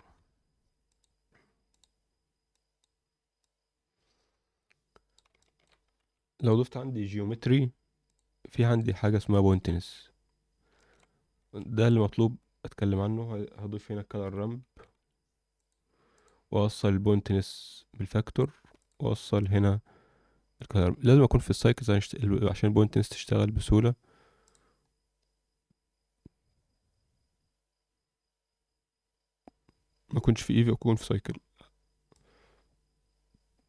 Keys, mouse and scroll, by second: 2.5 click, 3.4-5.1 drag, 5.3 alt+shift+middle click, 6.0 shift+a, 8.9 scroll up 1, 9.3 shift+middle click, 9.6-10.6 scroll up 1, 10.7 shift+middle click, 11.1 scroll down 2, 11.3 shift+a, 12.5 shift+scroll up 1, 17.5-18.3 drag, 18.8 ctrl+shift+click, 20.3-21.5 scroll down 2, 21.5-23.2 scroll down 8, 28.1 click, 28.1 scroll down 4, 31.2-32.1 scroll up 1, 32.1-33.6 drag.